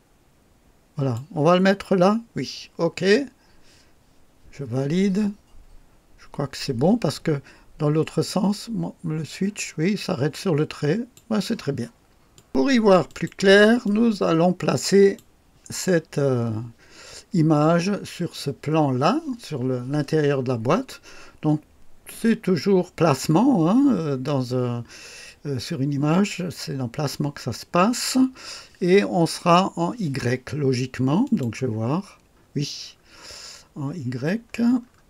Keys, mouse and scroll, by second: 8.2 click, 12.3 click, 13.1 click, 13.9-15.4 drag, 31.3 click, 31.9-32.2 scroll down 1, 32.3-33.2 scroll up 4, 34.1-35.0 scroll up 7.